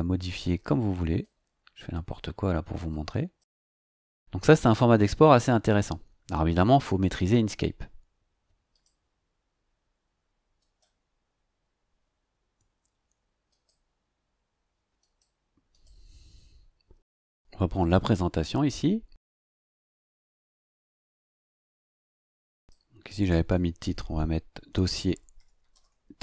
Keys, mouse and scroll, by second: 0.6 click, 2.8 click, 8.7 click, 10.6 click, 13.5 click, 15.0 click, 15.7 click, 17.8 click, 22.5 click, 24.4-26.1 typing.